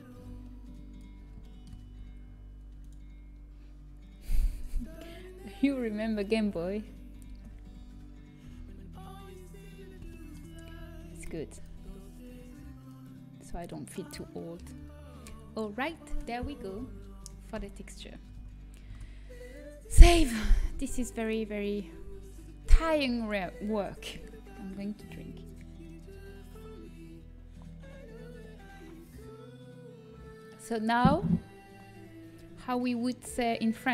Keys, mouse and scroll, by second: 1.0 b, 8.9 shift+l, 8.9 g, 12.7 s, 17.5 a, 18.9 ctrl+s, 21.4-22.6 drag, 22.6-23.7 right drag, 23.1 click, 23.1 middle click.